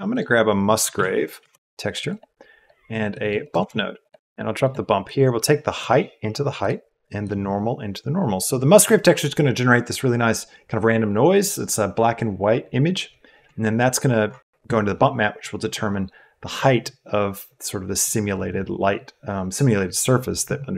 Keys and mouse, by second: 3.1 click, 3.5 shift+a, 4.1 BackSpace, 5.0 click, 5.9 click, 6.5 click, 7.2-8.4 drag.